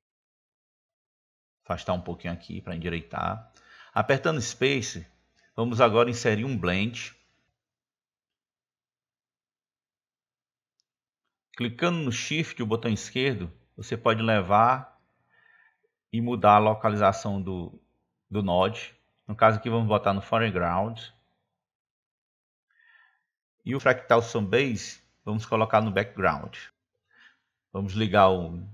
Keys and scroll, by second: 5.9 space.